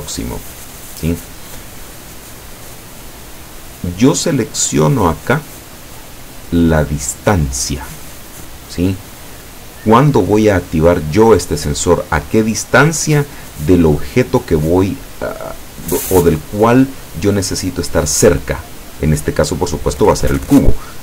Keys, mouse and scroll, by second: 0.0 click, 1.8-2.9 drag.